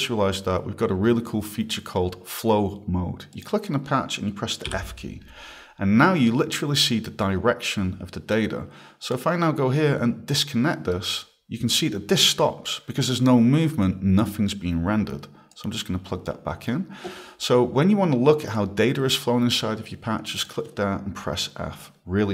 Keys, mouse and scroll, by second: 3.3 click, 4.7 f, 9.1 click, 10.9 right click, 15.5 click, 20.4 click.